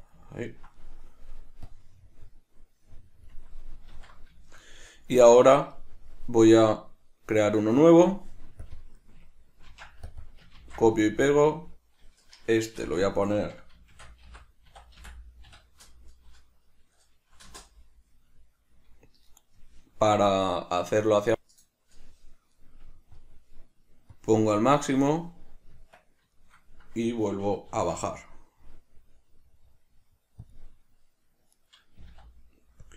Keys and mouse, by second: 1.7 click, 3.9 q, 4.4 middle click, 5.3 Tab, 8.1 click, 8.6 click, 8.7-10.1 drag, 10.2-23.4 drag, 12.9 BackSpace, 17.5 Return, 24.3-26.1 drag, 25.9 Tab, 26.5 middle click, 31.7 right click.